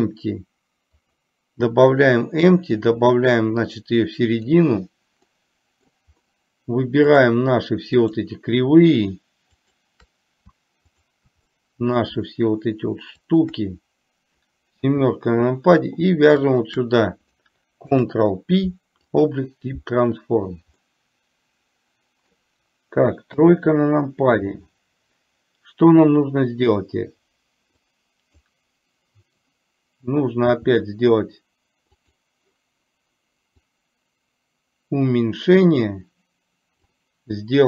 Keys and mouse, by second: 3.0-4.7 drag, 5.4 middle click, 7.2 click, 8.1 click, 9.7 shift+click, 11.0 shift+click, 11.6-12.0 middle drag, 13.4 shift+click, 16.6 click, 17.9 ctrl+p, 20.9-21.7 middle drag, 27.9-28.6 drag, 30.6 s, 34.0-37.0 drag.